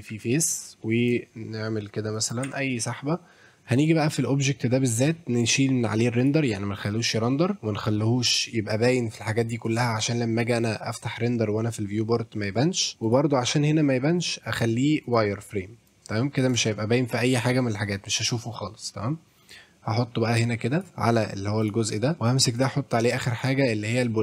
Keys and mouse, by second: 0.4 middle click, 0.8 middle click, 2.2 shift+click, 2.5 Tab, 3.8 click, 6.2 click, 7.9 click, 13.0 click, 14.2-15.2 drag, 15.9-16.5 drag, 19.4-20.8 drag, 20.9 middle drag, 21.6 click, 22.6 click, 23.4-24.2 drag.